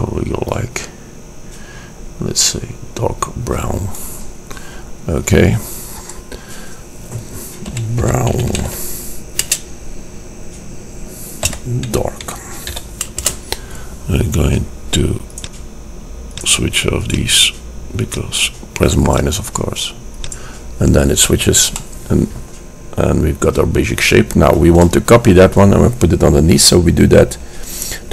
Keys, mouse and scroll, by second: 6.2-7.9 drag, 15.5-22.0 drag, 22.0-27.6 middle drag.